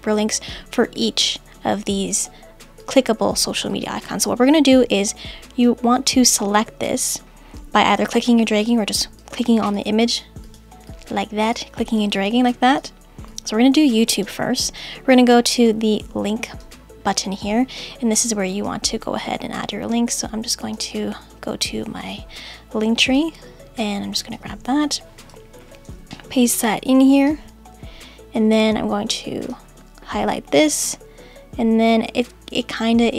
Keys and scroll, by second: 25.9 super+v.